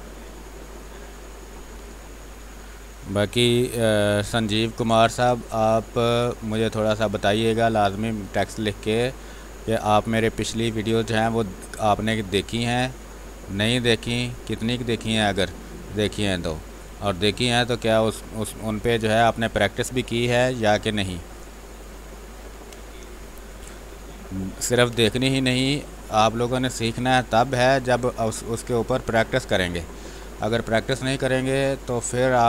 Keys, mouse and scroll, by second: 0.2 space, 0.4-4.2 drag, 4.2 space, 4.7 space, 5.6-11.4 drag, 11.4-12.7 drag, 12.7-15.3 drag, 15.3 ctrl+z, 15.7-19.3 drag, 19.3 space, 19.6-24.2 alt+drag, 24.2 click, 24.5 b, 26.1-30.3 drag, 30.3 ctrl+z, 32.2-32.4 drag.